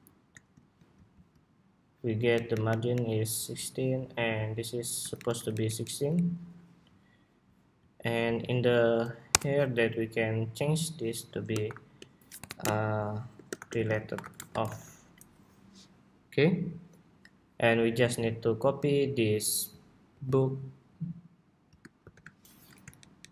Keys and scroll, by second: 2.0 alt+Up, 4.9 alt+shift+Up, 5.1 alt+Down, 6.1 alt+Up, 15.0 Escape, 19.9 super+c, 21.7 shift+super+v.